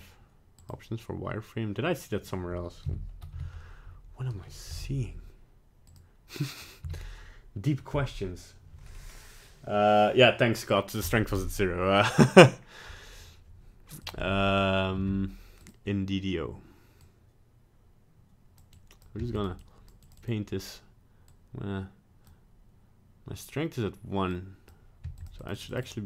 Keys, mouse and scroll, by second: 0.6 click, 2.8 n, 3.3 n, 4.7 n, 5.8 click, 6.8 n, 11.9 middle click, 14.0 click, 14.4 middle click, 14.9 f, 17.0 click, 18.7 click, 19.1 f, 19.6 click, 20.0 click, 20.2 click, 21.2 click, 24.3 click, 25.0 f, 25.4 click, 25.7 click, 25.9 click.